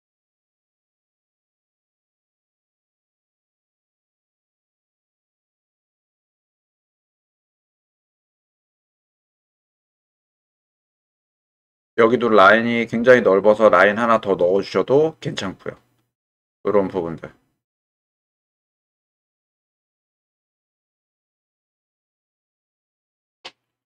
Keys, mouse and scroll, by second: 1.1 g, 2.2 click, 2.6 click, 3.5 middle click, 3.9 click, 4.1 middle click, 5.3 shift+click, 5.8-11.8 middle drag, 19.8-21.7 middle drag, 22.6 middle click.